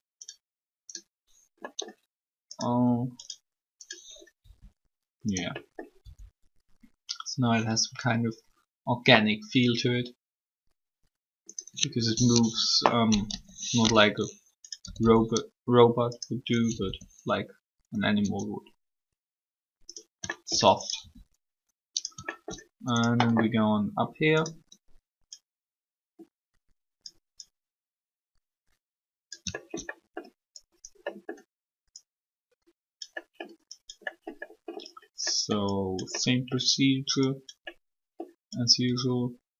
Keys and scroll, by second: 4.4 r, 12.3 3, 15.0 typing, 16.7 r, 21.0 alt+shift+r.